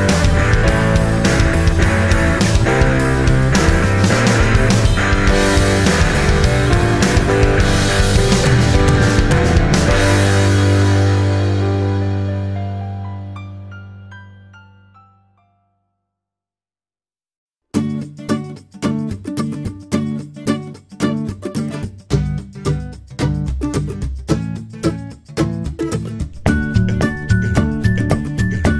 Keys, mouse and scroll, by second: 18.5 click.